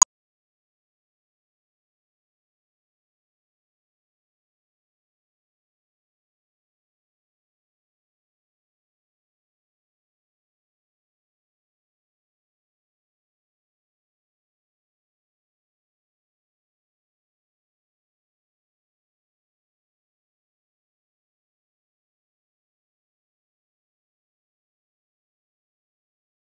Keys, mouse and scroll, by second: 0.0 Tab, 0.3 s, 1.2 Tab, 1.7 Tab, 2.2 ctrl+z, 2.9-3.3 scroll up 10, 3.3 shift+middle click, 3.4 ctrl+z, 3.7 scroll down 7, 3.8 scroll up 10, 4.1 shift+middle click, 4.3 s, 6.2 g, 6.7 Tab, 6.9-7.2 scroll down 1, 7.2 Tab, 7.4 s, 8.5 g, 9.1 s, 9.8 g, 11.0 s, 11.3 g, 12.2 Tab, 12.7 click, 13.0 shift+middle click, 13.2 Tab, 13.4 scroll down 7, 13.6 s, 13.9 Tab, 14.1 Tab, 14.2 s, 14.5 Tab, 14.9 click, 15.4 middle click, 15.5 scroll down 4, 15.9 middle click, 16.0-16.5 ctrl+shift+drag, 16.5 Tab, 16.6 s, 16.9 Tab, 17.0 ctrl+shift+click, 17.2 scroll up 1, 17.3 shift+middle click, 17.5 click, 17.6 Tab, 17.8-18.3 scroll up 13, 18.3 scroll down 8, 18.5 s, 19.4 scroll down 3, 19.5-20.4 scroll up 8, 19.7 s, 20.4 shift+middle click, 20.5 scroll down 6, 20.6 s, 21.3 Tab, 22.0 click, 22.6 Tab, 22.9 a, 23.0 s, 23.3 Tab, 23.9-24.5 shift+middle drag, 24.5 click, 24.6 scroll up 3, 24.8 middle click, 25.0-26.5 drag.